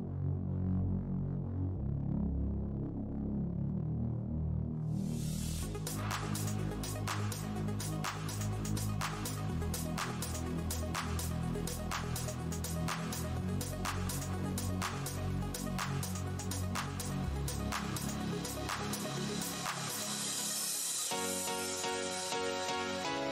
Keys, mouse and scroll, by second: 0.5 alt+click, 0.6 alt+Tab, 0.8 alt+shift+w, 1.4 v, 1.9 r, 2.5 Tab, 3.1 alt+click, 3.2-4.1 typing, 5.1 shift+Tab, 5.7 click, 6.0 right click, 6.3 click, 6.6 Tab, 6.8 alt+click, 7.7 Tab, 8.1 click, 8.5 shift+Tab, 8.7 shift+click, 8.7 shift+Tab, 9.2 z, 9.8 shift+right click, 9.9 shift+Tab, 11.4 click, 11.5 Tab, 12.4 alt+click, 12.5 alt+Tab, 13.8-15.8 typing, 14.1 click, 14.5 Tab, 15.3 Tab, 16.5 Tab, 16.8 click, 17.8 Tab, 18.5 click, 20.1-20.6 scroll down 1, 20.6-21.2 scroll down 1, 21.2 click, 21.3 click, 21.4-21.8 scroll down 1, 21.9 Tab, 22.2 space, 22.5 alt+click, 22.7 r.